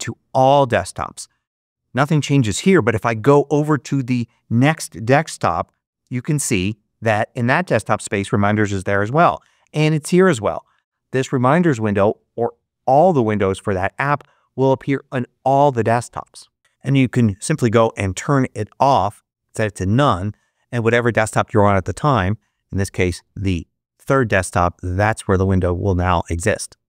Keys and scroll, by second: 5.3 ctrl+Right, 8.8 ctrl+Right, 23.1 ctrl+Up.